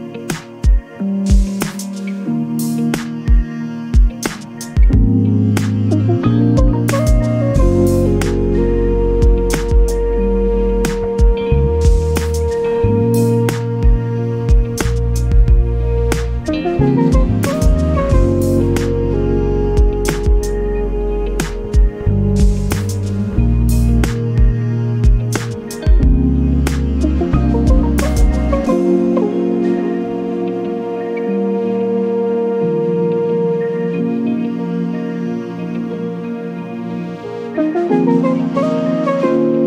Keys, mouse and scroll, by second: 0.7 click, 1.4 click, 2.0 click, 2.6 click, 4.1-4.6 ctrl+scroll up 2, 8.2 ctrl+click, 8.8-9.2 ctrl+scroll down 2, 9.8 ctrl+space, 10.8 ctrl+click, 11.4 space, 14.2 space, 16.2 click, 17.9-20.7 drag, 22.0 click, 23.5 click, 24.9 ctrl+d, 25.3-27.7 ctrl+drag, 30.1-33.4 drag, 34.4 space, 35.5 ctrl+d, 37.4 shift+click, 39.3-39.6 shift+drag.